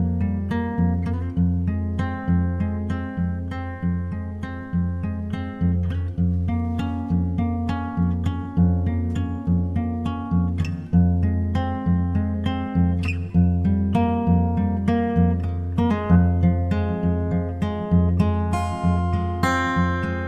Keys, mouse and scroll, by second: 3.6-8.6 drag, 9.6 BackSpace, 16.6-18.4 drag, 20.2 click.